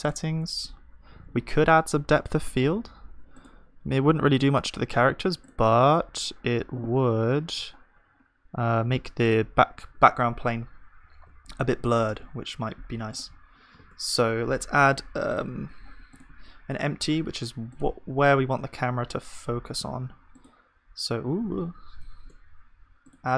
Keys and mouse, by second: 12.8-13.8 drag, 13.8 shift+s, 16.9 shift+a, 21.6 ctrl+z, 22.1 shift+a.